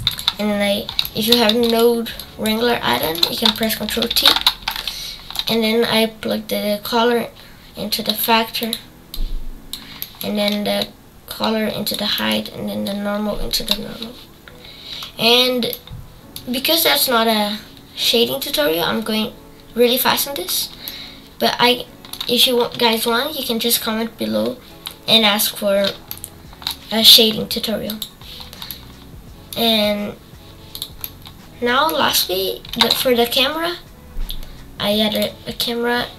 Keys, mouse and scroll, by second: 1.6-4.1 drag, 4.1 ctrl+t, 6.8-8.2 drag, 9.1 click, 11.2 click, 12.8 click, 14.3 scroll down 4, 15.0-15.7 scroll down 5, 15.7-16.8 middle drag, 16.8 scroll up 5, 21.0-27.9 shift+middle drag, 27.9 click, 28.7-29.8 middle drag, 29.8 scroll up 3, 30.8 click, 31.0-35.2 middle drag, 35.2 shift+a.